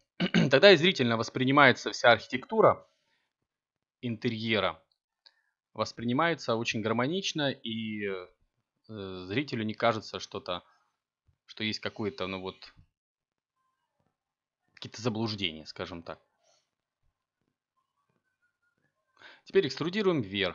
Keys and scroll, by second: 0.5 e, 10.5 e, 13.7 1, 19.3 a.